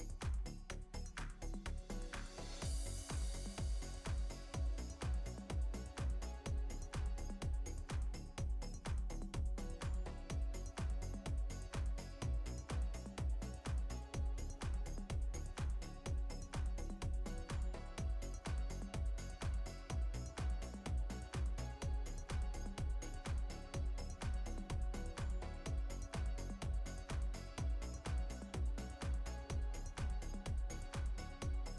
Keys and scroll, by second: 2.7 space, 5.5 space, 7.6 space, 14.0 space, 18.2 space, 25.7 space, 28.6 space.